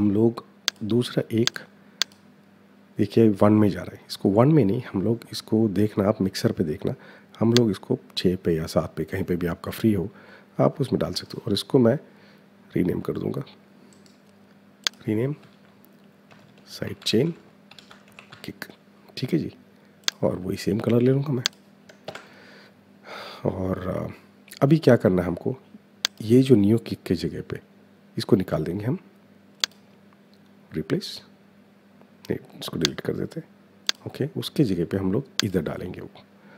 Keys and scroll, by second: 15.2-18.7 typing, 21.8 Return.